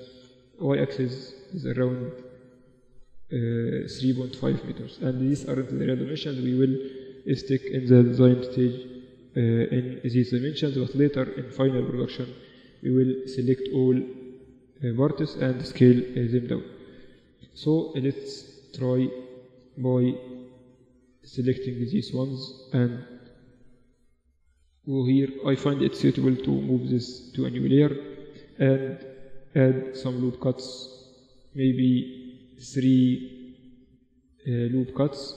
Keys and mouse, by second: 5.0-7.1 middle drag, 7.1 n, 9.9-11.7 drag, 11.7-13.1 middle drag, 13.1-14.7 right drag, 14.7-17.3 drag, 15.0-17.3 right drag, 17.3-18.3 middle drag, 18.3 Tab, 19.7-22.9 middle drag, 22.9 click, 22.9 g, 24.3-25.6 drag, 24.6 g, 25.6 Tab, 26.5 m, 27.7-28.7 drag, 28.7 Tab, 29.5 ctrl+r, 31.5 ctrl+z, 32.2 ctrl+r.